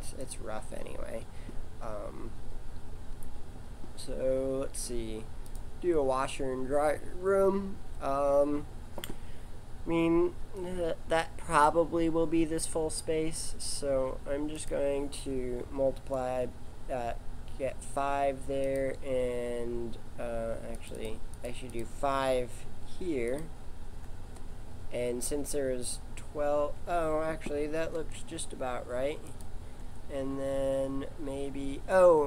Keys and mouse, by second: 4.5 shift+a, 14.5 click, 20.9-25.1 drag, 27.7 g.